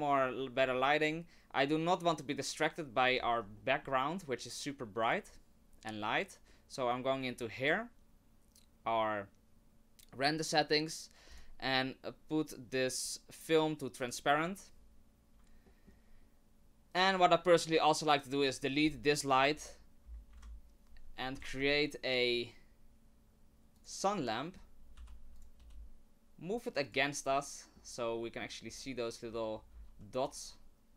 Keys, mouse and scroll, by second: 3.2-3.6 scroll down 6, 3.6 middle click, 5.0 click, 11.3 click, 14.0 click, 15.6 shift+middle click, 16.2-17.0 scroll up 1, 18.3 click, 20.4 Delete, 21.0-21.3 scroll down 2, 21.4 shift+a, 24.4 middle click, 24.9 g, 25.6 r, 27.3 middle click, 28.2 middle click, 28.7-29.7 scroll up 2, 29.7 g.